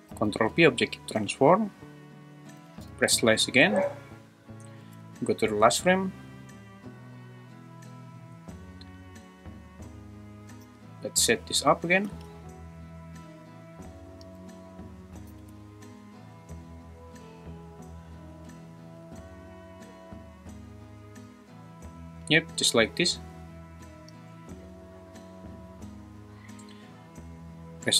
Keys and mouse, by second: 0.1 ctrl+p, 2.9 /, 3.6 `, 5.2 shift+Right, 7.1-8.2 middle drag, 10.6 r, 12.1 g, 14.3 click, 14.4 `, 15.3 g, 15.5 y, 18.3 `, 19.0 g, 22.4 click, 24.0 middle click, 24.3 `.